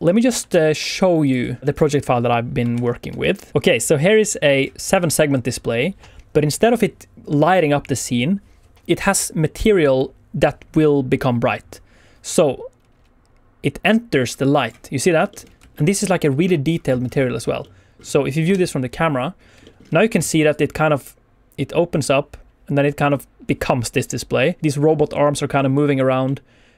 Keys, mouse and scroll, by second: 0.8 ctrl+s, 1.7 click.